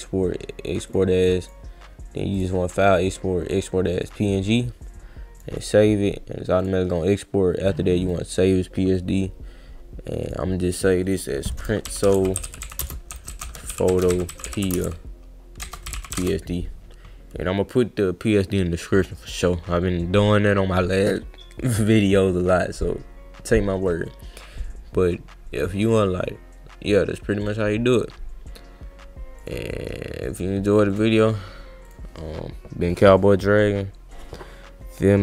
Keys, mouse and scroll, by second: 0.9 click, 1.4 click, 2.3 click, 4.0 click, 5.6 click, 6.6 click, 8.0 click, 10.2 click, 11.0 click, 12.0-16.7 typing, 13.1 Caps_Lock, 13.4 Caps_Lock, 19.4 click, 29.4 click, 30.9 click, 31.9 click, 33.3-34.4 scroll up 1, 34.4 scroll up 1.